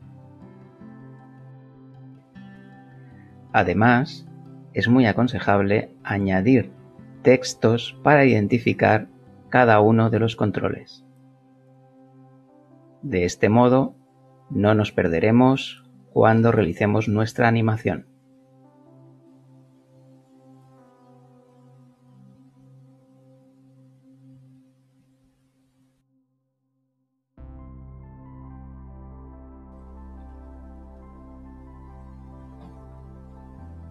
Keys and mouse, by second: 5.9 shift+a, 10.7 click, 12.5 s, 15.2 click, 16.0 g, 18.6 click, 19.9 s, 21.6 click, 22.5 g, 23.5 click, 24.3 Tab, 25.2 BackSpace, 27.9 shift+c, 30.2 BackSpace, 32.4 shift+b.